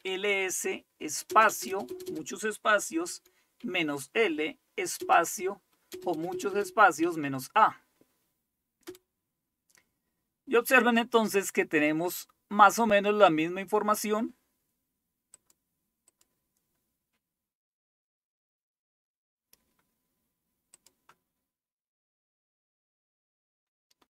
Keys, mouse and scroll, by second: 0.0-3.6 typing, 5.0-8.0 typing, 8.9 Return, 9.3-10.0 typing, 12.1-14.2 scroll up 1, 14.2-15.2 scroll up 1, 15.2 scroll up 1, 15.4 click, 16.2 click, 20.8 click, 22.8-24.0 scroll up 1, 24.0 scroll up 1.